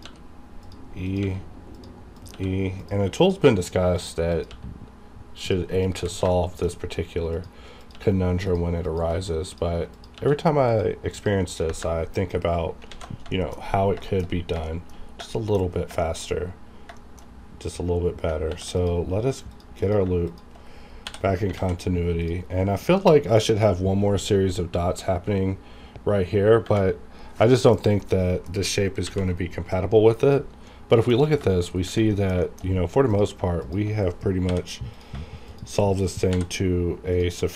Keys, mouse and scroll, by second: 0.0 e, 0.6 click, 1.2 e, 1.7 click, 2.3 e, 2.8 click, 3.3 e, 3.9 click, 4.0 click, 4.5 e, 5.4 click, 5.9 e, 6.3 shift+middle click, 7.3 click, 7.3 click, 7.9 e, 8.5 click, 9.0 e, 9.5 click, 9.5 click, 10.1 e, 10.7 click, 11.6 KP_Enter, 12.3-12.8 scroll down 1, 12.9 alt+a, 13.3 shift+middle click, 13.5-13.9 scroll up 1, 14.0 shift+middle click, 14.2-14.5 shift+scroll up 2, 14.7 shift+middle click, 15.0 scroll down 1, 15.3 shift+middle click, 15.7 scroll up 1, 16.0 shift+middle click, 16.3-16.9 shift+scroll up 2, 17.0 shift+middle click, 18.5 ctrl+r, 18.8 click, 20.3 shift+click, 21.0 j, 21.5 alt+a, 22.2 click, 26.7 scroll down 1, 27.4 middle click, 27.7-28.0 scroll down 1, 28.0 middle click, 29.0 alt+v, 29.7 click, 30.7 middle click, 31.7 shift+scroll up 1, 32.1 middle click, 32.6 shift+scroll up 1, 33.1 click, 33.6 shift+click, 34.5 j, 34.9 click, 35.5 shift+click, 36.3 j, 37.1 click.